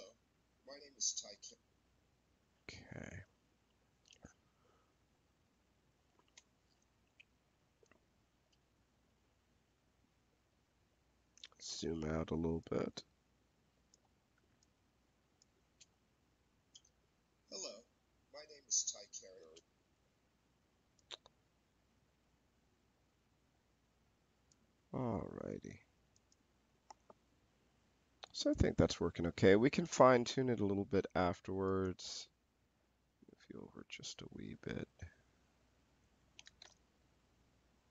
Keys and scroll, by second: 1.2 space, 15.4 space, 19.3 space.